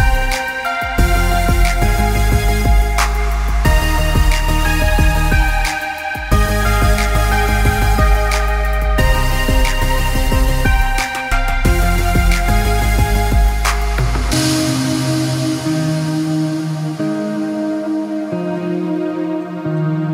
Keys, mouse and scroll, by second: 0.4 click, 0.8 click, 1.2 middle click, 1.6 click, 2.9 click, 3.4 click, 4.8 click, 5.3 click, 7.9 Tab, 8.9 middle click, 9.2 middle click, 9.4 middle click, 9.8 click, 10.3 click, 10.8 Tab, 11.3 click, 12.3 click, 12.9 click, 13.2 click, 13.7 click, 14.4 click, 15.0 click, 15.5 click, 16.0 Tab, 16.5 click, 17.0 click, 17.4-18.0 scroll up 3, 17.8 middle click, 18.5 click, 19.0 Tab, 19.4 click, 19.8 click.